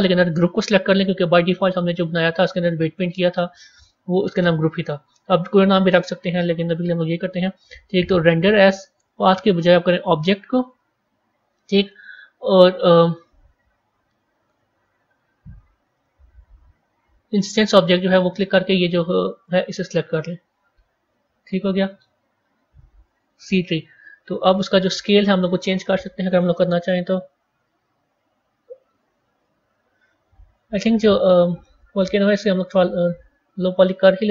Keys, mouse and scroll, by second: 3.6-7.4 drag, 7.4 scroll up 1, 8.2-11.7 drag, 11.7-13.6 scroll down 2, 13.6-13.9 scroll up 1, 14.3 scroll up 5, 14.3-16.5 scroll down 6, 16.5 click, 26.2-30.0 drag, 31.5-32.1 middle drag, 32.1-33.5 scroll down 10.